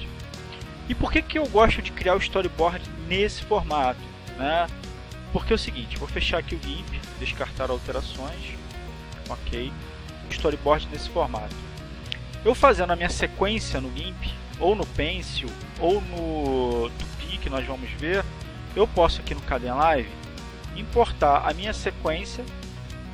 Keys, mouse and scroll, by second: 5.9 click, 7.1 click, 9.9 click, 10.7-11.9 drag, 19.5 click, 20.6-23.1 drag.